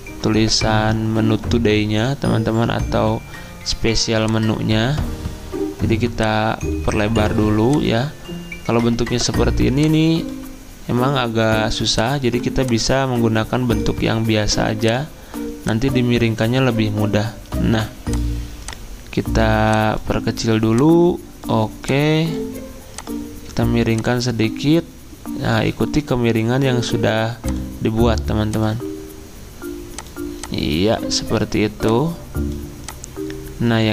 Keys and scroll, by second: 7.0 ctrl+z.